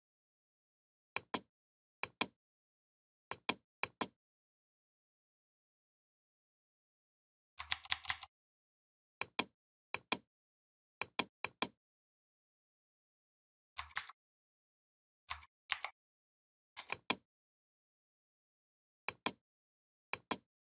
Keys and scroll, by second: 7.4 ctrl+[, 13.7 ctrl+c, 15.5 ctrl+f.